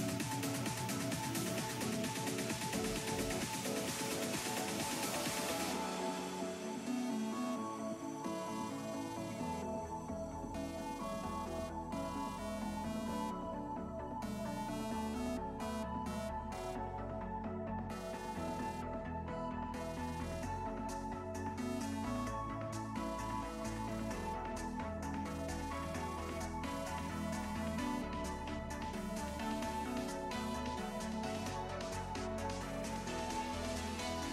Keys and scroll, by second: 11.3 s, 17.4 s, 18.2 s, 22.3 s, 23.1 s, 27.3 s, 31.9 s, 33.7 s.